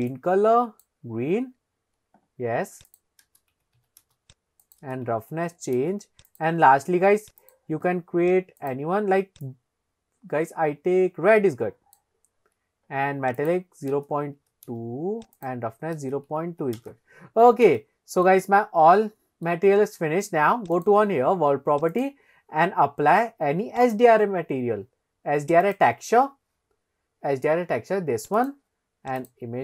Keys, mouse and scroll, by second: 2.9-4.3 drag, 5.0 click, 6.5 click, 7.6-8.3 drag, 8.7 drag, 13.4-15.2 drag, 15.7-16.9 drag, 18.2 shift+middle click, 18.7-19.6 middle drag, 20.7 click, 21.9-24.1 drag, 25.6 click.